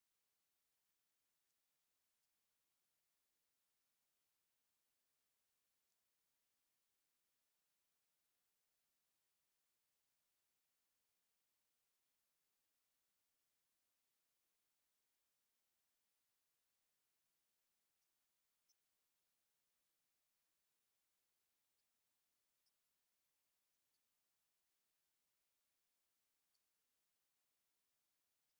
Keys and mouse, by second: 4.3 s, 11.5 s, 17.5 right click, 21.2 click.